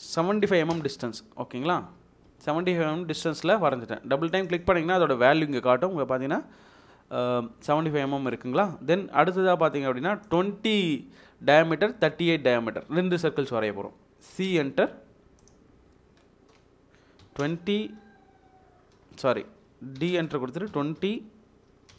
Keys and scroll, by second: 0.4-0.7 typing, 0.7 Return, 1.8 Escape, 2.3 Escape, 8.1 Escape, 8.9 Escape, 14.3 c, 14.4 space, 17.3 typing, 18.9-21.9 typing.